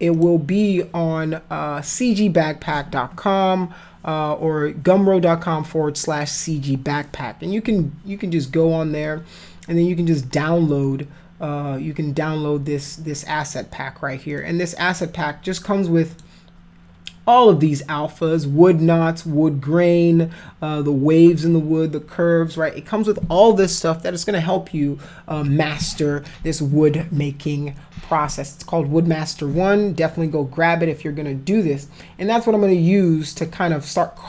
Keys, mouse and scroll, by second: 0.1 click, 14.3 click, 14.9 click, 16.1 click, 33.3 click.